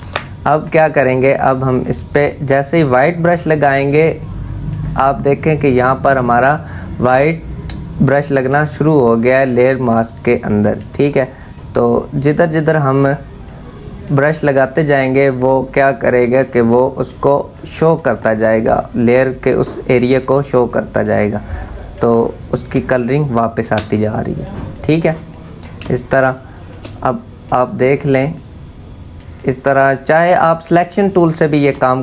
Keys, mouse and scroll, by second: 1.4-8.6 drag, 8.6-21.9 drag, 22.3 space, 22.5 click, 22.9 space, 23.6-25.5 drag, 25.5 space, 25.5 click, 25.9 space, 26.7-31.4 drag, 31.4 space, 31.5 click, 31.8 space.